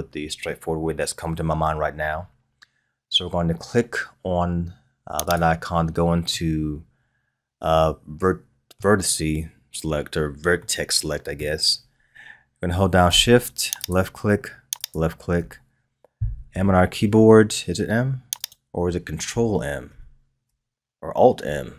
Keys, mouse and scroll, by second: 5.2 click, 6.3-9.4 middle drag, 10.6-13.6 middle drag, 13.8 shift+click, 14.8 shift+click, 16.5 m, 18.4-21.4 right drag.